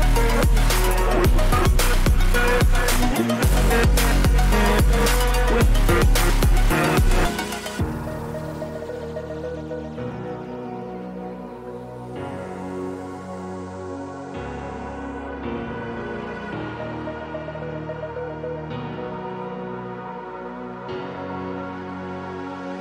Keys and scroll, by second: 13.9 v, 17.4 ctrl+t.